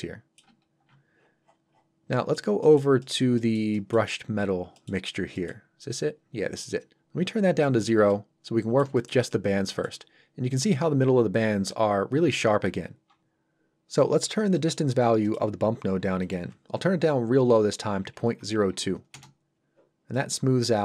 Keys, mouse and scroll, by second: 1.4 scroll down 1, 2.1 middle click, 4.1-4.5 scroll up 1, 4.7 middle click, 5.1 scroll up 1, 5.3 middle click, 5.9 click, 8.1 middle click, 8.9 shift+middle click, 9.3 middle click, 14.5 middle click, 14.9 scroll up 1, 15.2 middle click, 16.2 click, 19.1 Return, 20.1 middle click.